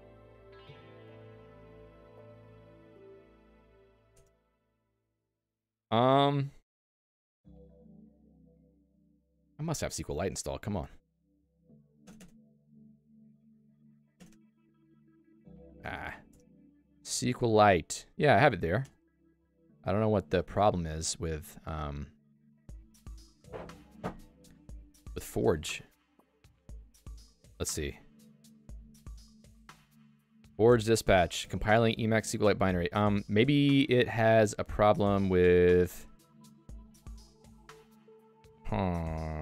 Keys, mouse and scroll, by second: 4.2 Return, 13.1 click, 15.1-17.6 typing, 15.5 Escape, 16.3 super+Return, 18.8-20.8 typing, 24.4 Return, 27.0 Return.